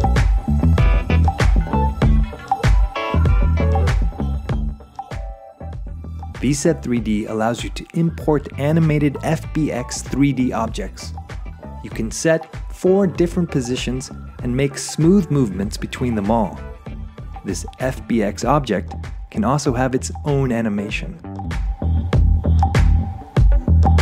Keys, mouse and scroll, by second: 3.8 scroll, 6.4 shift+scroll, 6.5-7.2 shift+scroll, 8.1 shift+click, 13.6 click, 16.7 click, 18.8 click, 20.4 click, 20.8 click, 22.9 click, 23.9 click.